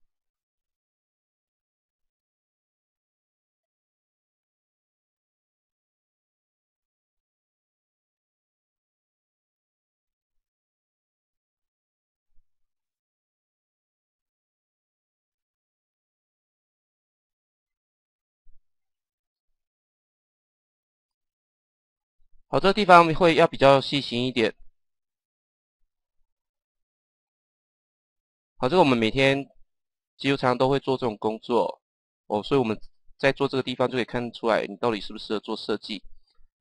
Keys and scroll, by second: 9.4 Page_Down, 13.9 Page_Down, 17.1 Page_Down, 19.1 Page_Down, 24.1 Page_Down, 35.4 Page_Down.